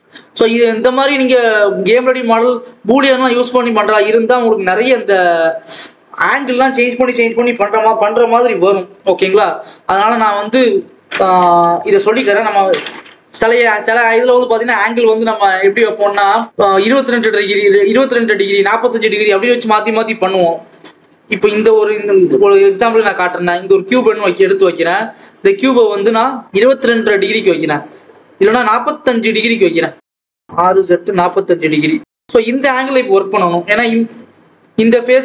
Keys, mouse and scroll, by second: 1.7 click, 2.6 ctrl+s, 3.2 click, 3.5 scroll up 1, 5.3-21.0 drag, 21.0 shift+a, 21.4 scroll up 2, 21.7-22.1 scroll down 2, 22.1 g, 24.5 n, 26.3 click, 31.2 click, 31.9 scroll up 2, 32.2 Tab, 32.4 s, 33.6-34.1 scroll down 1, 34.5 click.